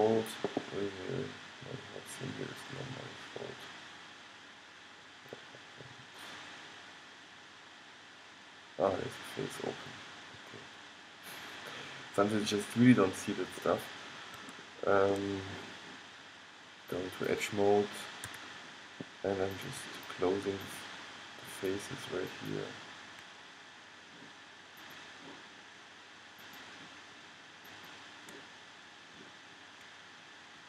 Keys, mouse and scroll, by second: 1.0-3.7 middle drag, 4.6 middle click, 6.0 middle click, 14.1-16.6 middle drag, 17.1-21.9 drag, 18.4 a, 23.4 click, 28.7-30.0 drag, 30.0 middle click.